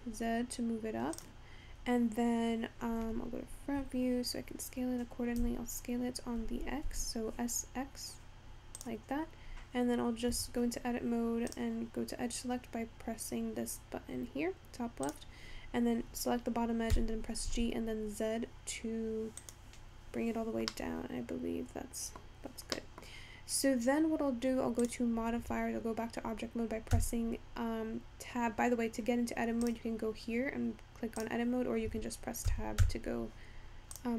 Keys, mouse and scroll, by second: 5.4 s, 11.3 Tab, 11.7 click, 15.1 click, 16.9 g, 20.7-22.3 middle drag, 22.3-22.7 scroll down 2, 22.8 middle click, 23.1-24.8 scroll up 3, 24.8 click, 25.5 Tab, 27.4 Tab, 29.7-32.5 drag, 32.5 Tab, 32.7 Tab, 33.1 Tab.